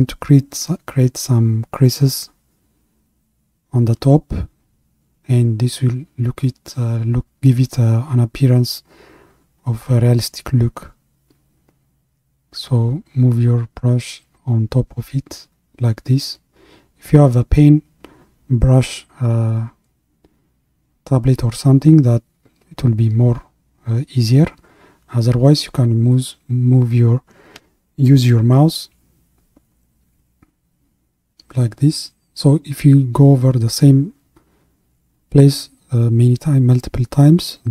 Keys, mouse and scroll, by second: 0.0-2.8 drag, 2.8-5.2 scroll up 2, 5.2-15.1 middle drag, 15.1-18.2 drag, 21.6-24.8 drag, 37.6-37.7 drag.